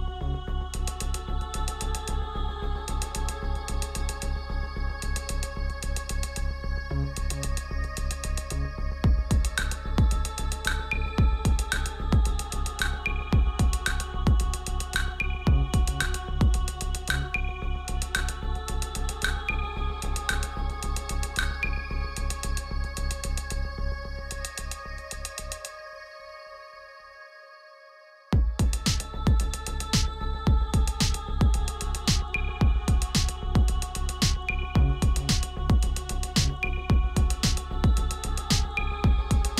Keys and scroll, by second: 26.3 ctrl+t, 27.6 Return, 28.5 ctrl+z, 36.2 ctrl+v.